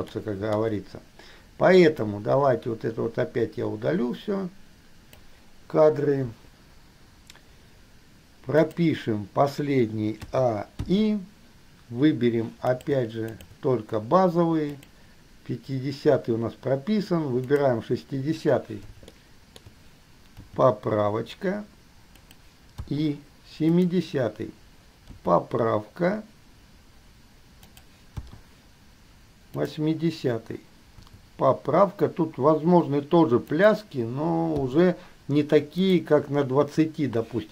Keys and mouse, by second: 0.1-2.2 shift+middle drag, 3.8-5.3 drag, 6.4 Delete, 8.8 click, 10.4 a, 11.1 i, 12.9 click, 13.4 shift+click, 14.9 click, 17.7 click, 19.6 shift+middle click, 20.7 g, 23.1 i, 24.1 click, 25.3 g, 28.3 i, 31.2 g, 34.8 i.